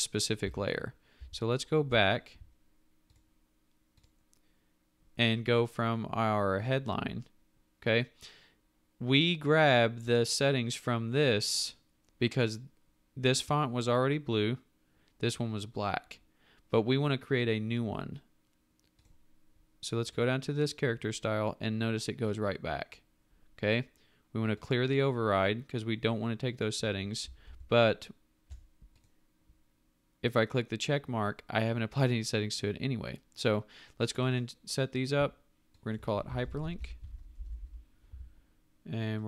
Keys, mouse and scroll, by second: 0.4 ctrl+alt+z, 27.4 ctrl+alt+z, 36.2-38.1 typing, 38.1 Tab.